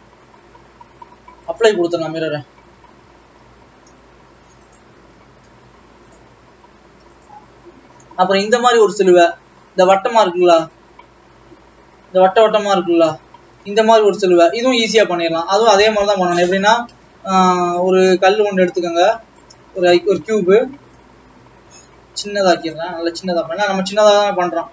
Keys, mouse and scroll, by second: 1.6-2.8 drag, 2.8 g, 14.8 g, 15.7 Tab, 16.3 Tab, 16.7 alt+a, 17.9 click, 19.4 shift+a, 20.2 KP_1, 20.7 scroll down 3, 21.3 scroll down 6, 21.7 s, 23.3-23.7 scroll up 14, 24.2 s.